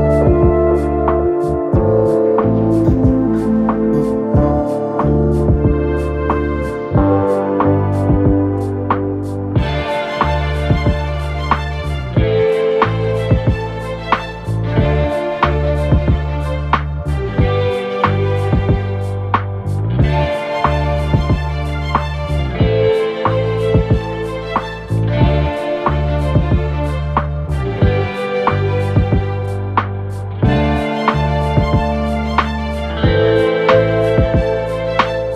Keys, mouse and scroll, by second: 13.6 Delete, 18.0 click, 24.0-25.8 typing, 30.0-35.3 drag.